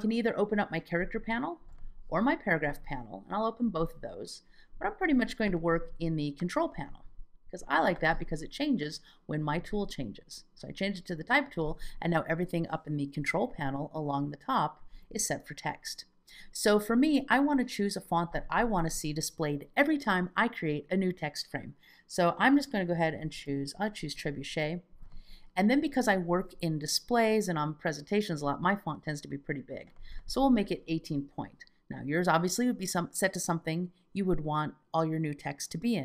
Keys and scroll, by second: 13.3 alt+z, 14.9 alt+z.